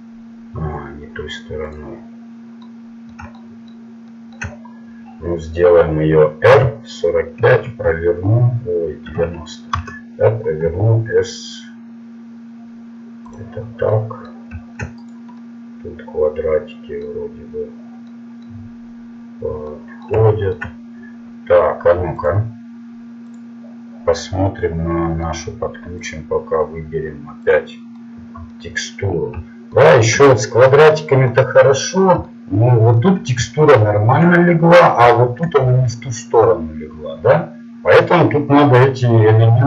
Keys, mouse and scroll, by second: 2.2-3.5 middle drag, 6.5 r, 10.7 s, 14.2 middle click, 15.1 right click, 16.2 right click, 16.4 right click, 16.6 right click, 19.5-20.7 middle drag, 34.3-35.9 middle drag.